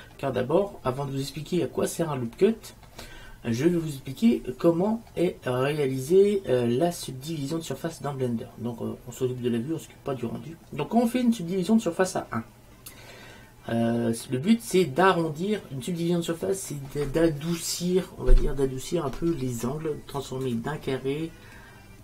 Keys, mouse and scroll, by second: 0.0-3.6 middle drag, 14.3-15.5 middle drag.